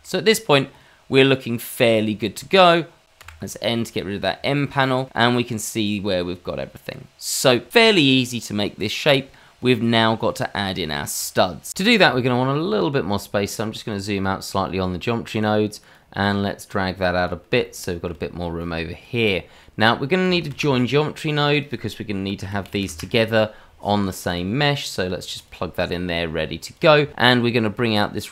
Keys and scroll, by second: 20.4 shift+a.